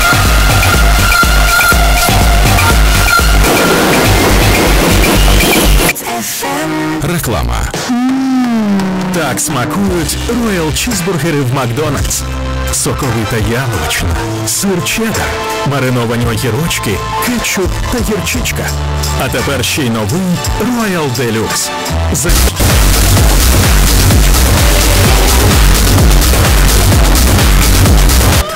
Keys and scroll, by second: 5.9 Page_Down, 28.5 space.